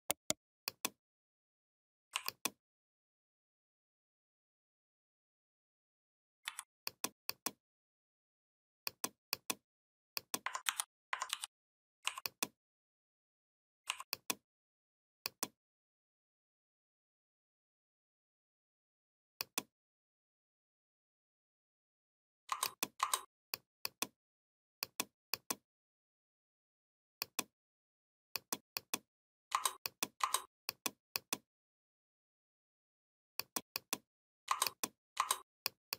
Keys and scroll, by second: 6.3 v, 10.5 ctrl+c, 11.1 ctrl+f.